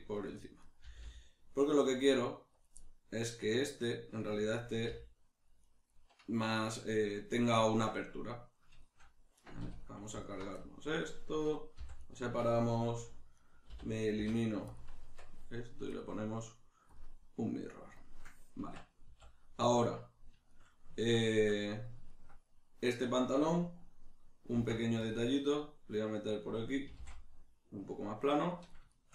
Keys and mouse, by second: 0.4 click, 0.6 right click, 0.8 g, 2.7 click, 2.8-5.7 middle drag, 4.9 g, 5.7 right click, 5.9-10.2 middle drag, 9.6 2, 10.2 alt+right click, 10.6-12.1 middle drag, 11.8 v, 12.1 right click, 13.3 right click, 13.6 l, 15.9-18.6 drag, 18.6 Tab, 19.3-26.4 middle drag, 24.5 ctrl+r, 26.4 click, 26.9 s, 28.6 click, 28.9-29.1 shift+middle drag.